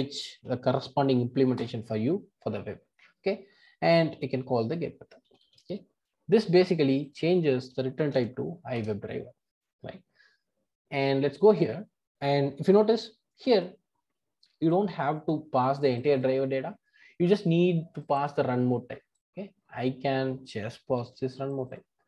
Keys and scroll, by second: 8.7 Return, 20.9 super+c.